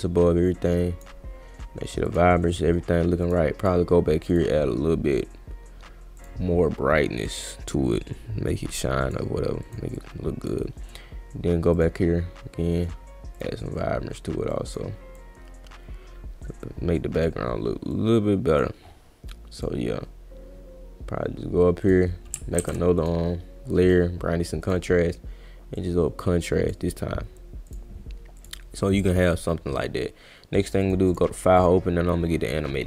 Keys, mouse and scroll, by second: 2.1 click, 3.2 click, 3.6 click, 4.3 click, 6.2 click, 7.4-9.1 drag, 8.6 right click, 8.8 right click, 9.6 click, 9.9-10.4 drag, 11.7 click, 13.4 click, 14.5 click, 15.1-17.2 drag, 17.9 click, 19.5 click, 21.8 click, 22.6 ctrl+z, 23.0 click, 24.6 click, 25.7-26.7 drag, 27.7 click, 28.4 click, 30.8 click, 31.1 click, 31.6 click.